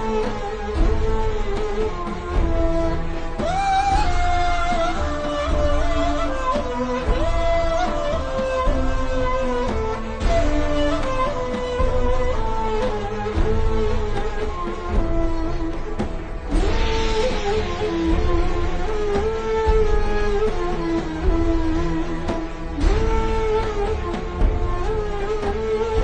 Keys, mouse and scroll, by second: 3.8 click, 4.1 v, 4.2 click, 7.5 click, 15.9 alt+shift+scroll down 1, 17.2 alt+shift+scroll up 1, 17.9 click, 19.2 alt+shift+scroll up 1, 19.5 click, 21.0 click, 22.0 alt+o, 22.7 alt+o, 22.8-23.6 typing, 24.1 click.